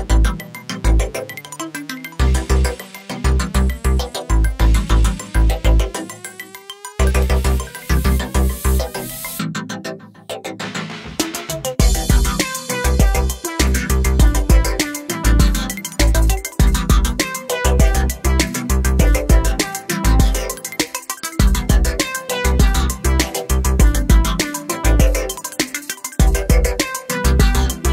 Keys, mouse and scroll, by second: 1.8 click, 2.9 click, 4.6 click, 9.7 click, 11.8 F4, 12.3 click, 14.1 ctrl+o, 14.9 scroll down 1, 18.4 click, 20.0 click, 22.2 click, 26.5 click.